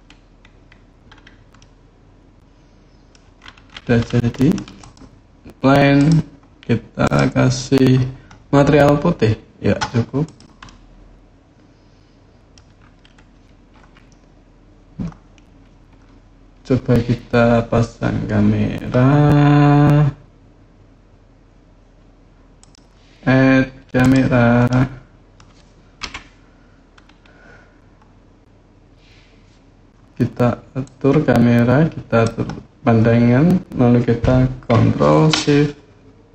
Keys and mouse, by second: 1.3-2.9 middle drag, 4.1 middle click, 6.8 click, 10.4-12.3 middle drag, 22.5-23.9 drag, 24.5 middle click, 24.6 click, 24.7-25.1 middle drag, 25.1 click, 25.8 KP_1, 30.7-32.1 drag.